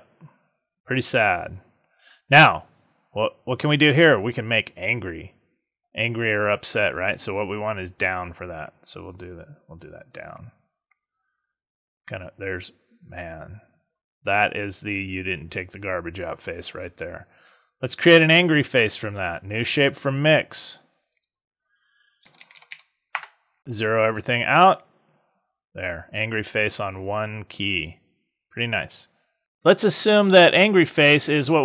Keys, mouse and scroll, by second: 7.6 click, 8.6 click, 10.2 click, 17.3 click, 21.0 click, 24.0 click, 24.7 click, 30.8 click.